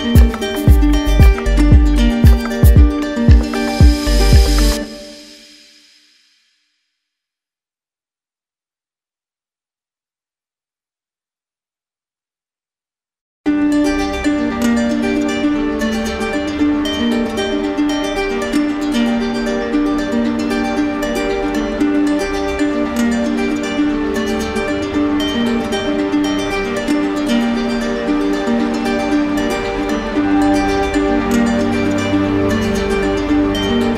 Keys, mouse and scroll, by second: 1.6 click, 2.9 click, 4.7 click, 5.2 alt+click, 6.3 right click, 7.7 right click, 8.9 click, 10.4 shift+click, 10.9 ctrl+z, 13.5 shift+click, 13.6 shift+click, 16.0 shift+click, 16.9 right click, 19.8 right click, 21.3 right click, 23.2 ctrl+click, 23.5 ctrl+z, 28.2 ctrl+click, 29.2 ctrl+w, 31.0 click, 32.5 click, 33.0 click.